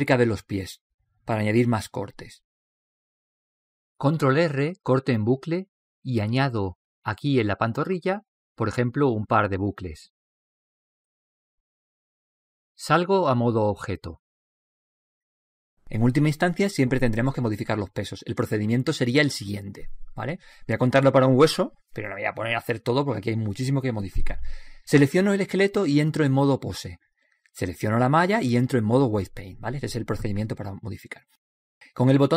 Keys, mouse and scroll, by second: 0.8 right click, 1.7-3.6 drag, 2.5 right click, 3.2-9.8 middle drag, 6.9 ctrl+r, 15.2-16.2 drag, 16.1-24.8 middle drag, 27.2-29.1 right drag, 28.1-29.9 drag, 29.7 right click, 31.7 click.